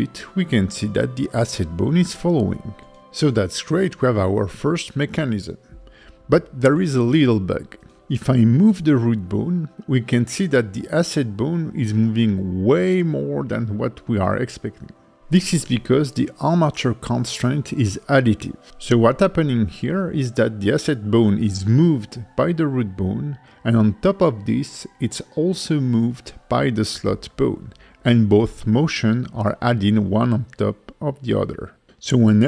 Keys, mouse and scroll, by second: 1.9 right click, 2.5 click, 7.1 click, 7.7 g, 10.3 right click, 10.9 KP_5, 11.2 KP_1, 12.2 g, 14.9 right click, 15.2 g, 17.9 right click, 18.1 g, 20.9 right click, 21.1 g, 26.3 right click, 29.1 click, 29.9 click.